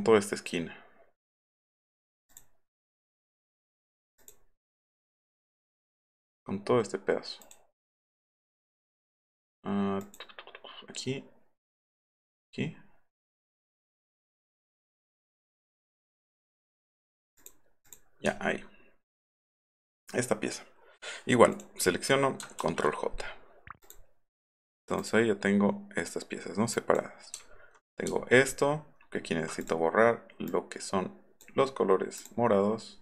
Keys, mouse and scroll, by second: 1.3 click, 1.8 click, 2.3 click, 3.6 click, 4.2 click, 7.4 click, 8.2 click, 10.0 click, 12.2 click, 15.0 click, 15.5 click, 17.4 click, 17.9 click, 21.5 click, 22.7 ctrl+j, 23.8 click, 25.0 click, 26.7 click, 28.2-29.4 alt+scroll up 8, 29.6 click, 30.5 click.